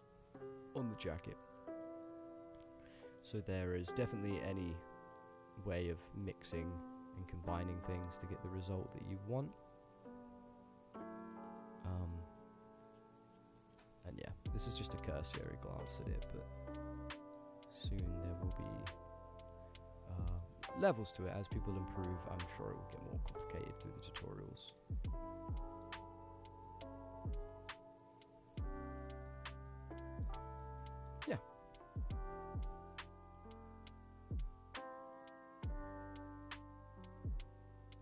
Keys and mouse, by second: 0.8 click, 1.0 g, 1.5 middle click, 2.4 click, 2.7 g, 3.9-4.6 drag, 5.3-6.2 drag, 6.4-7.0 drag, 7.2 click, 7.2 middle click, 7.9 middle click, 8.3 click, 8.4 g, 8.9 middle click, 9.3 click, 9.4 g, 10.0 click, 10.1 g, 11.2 middle click, 11.9 middle click, 12.9-13.2 middle drag, 13.6 ctrl+drag, 13.9 middle drag, 14.7 middle drag, 15.2 middle drag, 15.8 ctrl+middle click, 16.1 middle drag, 16.6 ctrl+middle drag, 17.2 middle drag, 17.9 middle click, 18.8 middle click, 19.4 click, 20.0 click, 20.3 middle click, 20.7 g, 21.1 click, 22.5 click, 22.8 g, 23.2 click, 23.4 middle drag, 23.9 g, 24.5-24.9 middle drag, 25.0 g, 25.6 middle drag, 26.0 g, 26.3 click, 27.5 middle click, 28.0 middle drag, 28.4 g, 29.1 middle click, 30.1 middle click, 30.2 click, 30.5 ctrl+click, 30.6 ctrl+middle click, 30.9 click, 31.0 middle click.